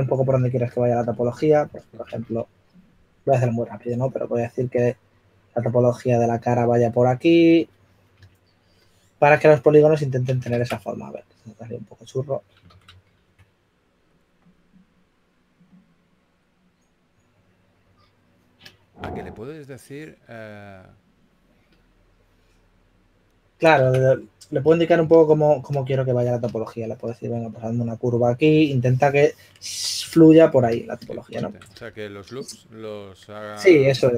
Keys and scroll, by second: 2.8 s, 26.6 s.